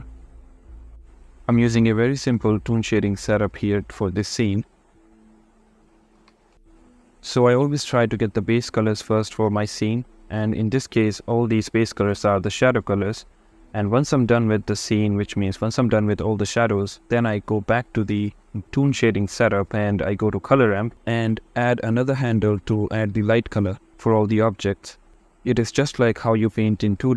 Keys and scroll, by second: 2.6 x, 3.1 shift+a.